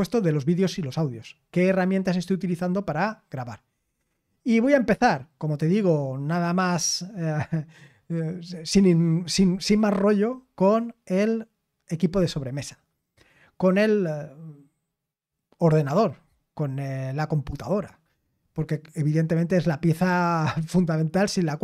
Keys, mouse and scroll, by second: 4.6-21.6 scroll down 2.